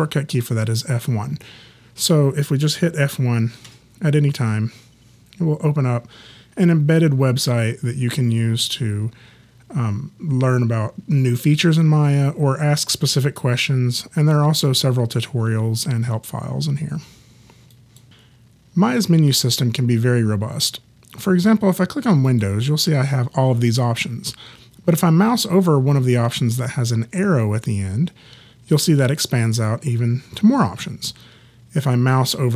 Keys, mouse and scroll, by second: 3.7 F1, 17.7 click, 22.3 click, 29.7 click.